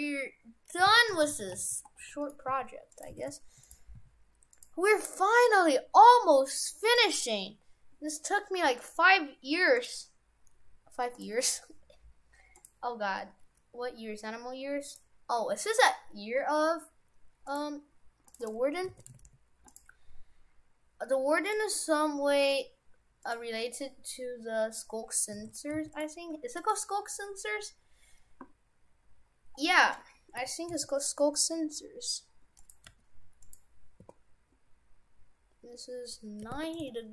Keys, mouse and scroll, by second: 1.3 shift+f, 2.5 s, 3.2 shift+f, 3.9 s, 5.4 click, 6.9 click, 8.8 click, 14.9 click, 18.9 shift+f, 21.5 click, 25.4 shift+f, 26.3 Tab, 26.6 right click, 27.1-27.9 scroll down 3, 27.9-28.5 scroll up 4, 28.5 scroll down 2, 29.3-30.1 scroll down 12, 30.3 a, 30.7 s, 32.9 g, 34.0 r.